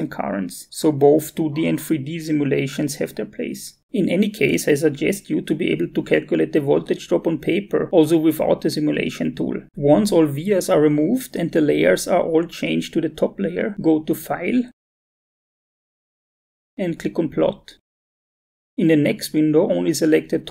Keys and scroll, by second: 9.7 Delete.